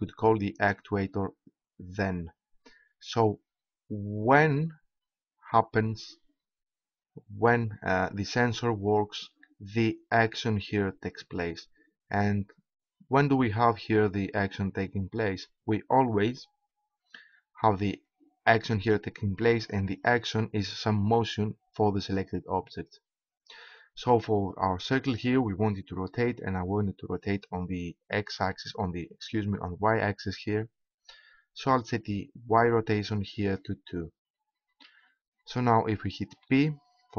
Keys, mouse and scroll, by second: 36.4 p.